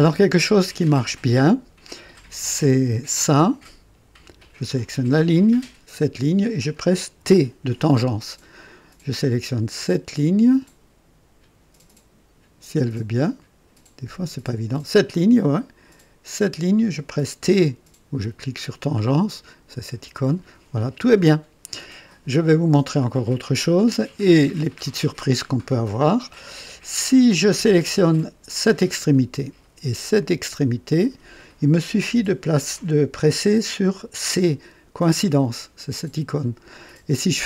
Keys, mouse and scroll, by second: 3.0 click, 5.9 click, 7.2 t, 14.6 click, 16.3 click, 20.0 t, 22.4 click, 23.0 click, 23.8 scroll up 1, 24.3-24.6 scroll down 1, 27.1 click, 28.4 click, 31.0 click.